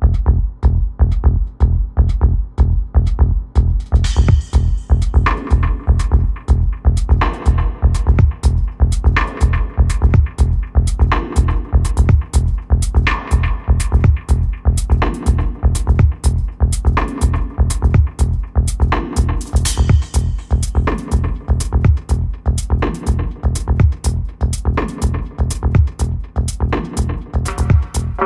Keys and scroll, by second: 18.0-19.2 typing.